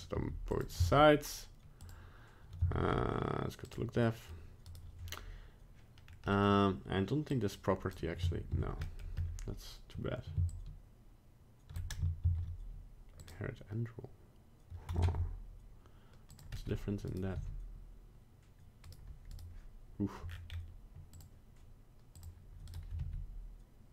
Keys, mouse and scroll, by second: 0.1 g, 0.7 z, 2.6 z, 4.0 middle click, 4.6 right click, 6.0 scroll down 1, 6.3 middle click, 6.5 middle click, 7.3 click, 8.5 ctrl+z, 8.8 middle click, 9.1 scroll up 1, 10.4 shift+click, 12.2 ctrl+z, 13.2 click, 15.0 ctrl+Tab, 16.5 middle click, 17.1 right click, 17.3 r, 19.3 right click, 20.3-21.1 scroll down 3, 20.4-21.1 scroll up 1, 21.1 click, 21.1 scroll up 1, 22.1 click, 22.7 right click, 23.0 r.